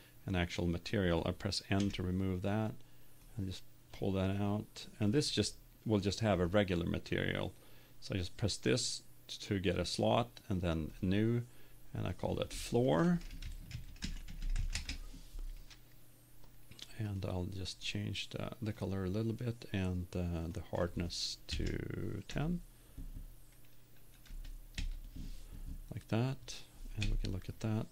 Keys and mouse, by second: 1.8 n, 3.4 click, 7.9 click, 10.9-14.0 drag, 14.4 o, 17.0-18.9 drag, 20.4-22.2 drag, 27.1 KP_0.